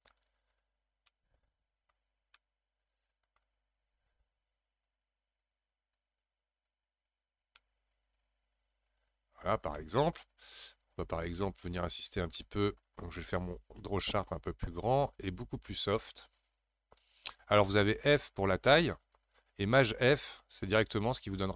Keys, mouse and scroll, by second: 1.0-2.0 middle drag, 2.0-2.4 scroll down 2, 2.4-4.8 middle drag, 4.8-7.6 drag, 7.6-11.2 middle drag, 11.2 click, 11.8-12.3 scroll up 2, 12.3-13.3 middle drag, 13.3 f, 16.2-18.0 drag, 18.0 f, 20.2 shift+f.